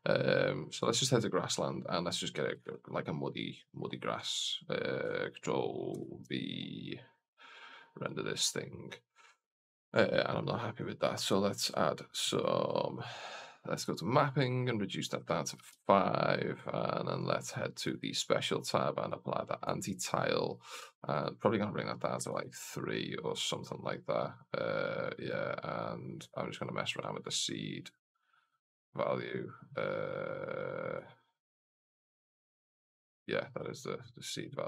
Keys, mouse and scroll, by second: 1.1-2.0 drag, 12.7 scroll down 2, 13.6 click, 13.6 scroll down 1, 14.6-16.5 drag, 17.7 click, 18.1 scroll down 1, 18.9 scroll down 1, 18.9-19.7 drag, 21.0-23.1 drag, 25.1-33.4 drag.